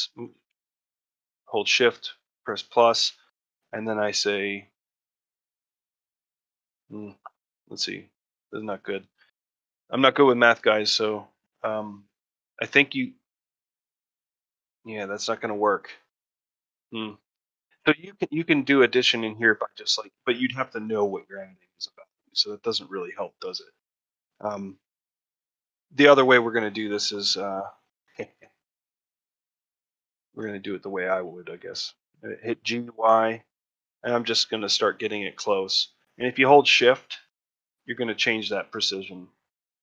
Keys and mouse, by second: 29.9 shift+middle click, 30.2 ctrl+middle click.